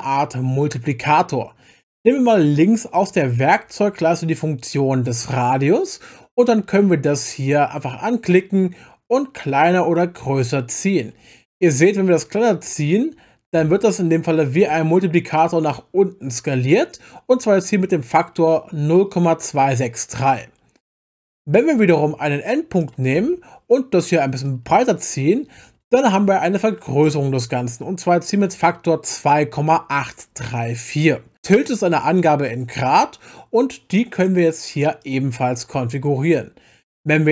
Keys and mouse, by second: 5.3 click, 8.3-15.4 drag, 21.5 middle click, 22.8 click, 24.5-27.5 drag, 35.0 click.